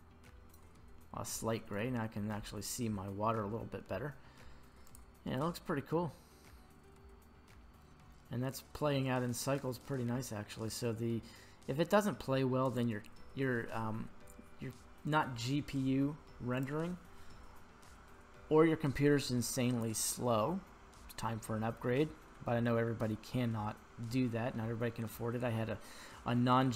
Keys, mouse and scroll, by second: 1.3-1.9 middle drag, 2.1 scroll up 1, 2.6 middle click, 4.8 click, 12.8 drag, 16.5 click.